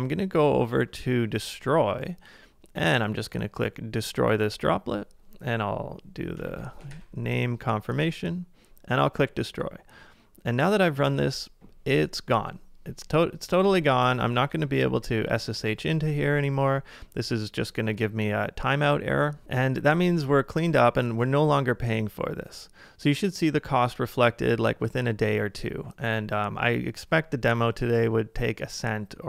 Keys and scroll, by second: 6.4 super+c, 6.9 super+v, 14.6 ctrl+r, 15.6 Return, 19.9 super+Tab.